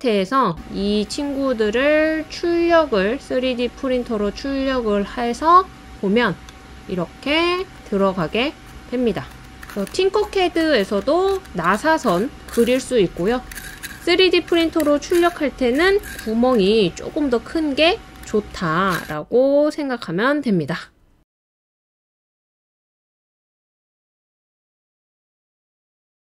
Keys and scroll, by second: 0.4 typing, 1.7 typing, 5.0-6.9 typing.